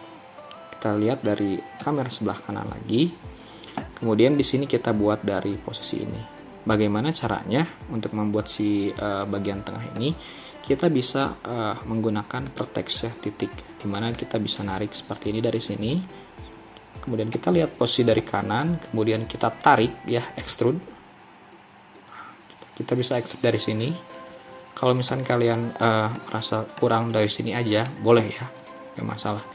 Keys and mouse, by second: 1.9 KP_3, 10.0-11.4 middle drag, 17.4 KP_3, 20.6 e, 26.2 middle click, 29.3 KP_3.